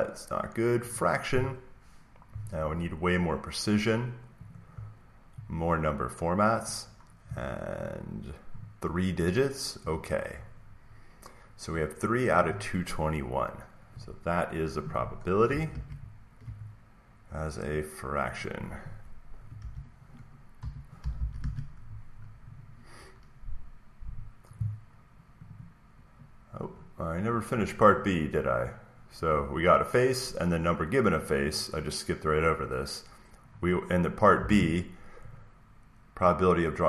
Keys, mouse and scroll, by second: 0.9-2.9 drag, 4.5 click, 8.5 click, 9.9 click, 15.4-17.5 drag, 15.6 alt+Tab, 17.7-19.7 drag, 19.5-21.8 typing, 22.5 click, 23.5 click, 25.4 click, 26.6-27.4 scroll, 27.4 scroll down 3, 27.6 click, 28.0 click, 31.1 click, 34.3 click, 34.4 alt+Tab, 35.2 click.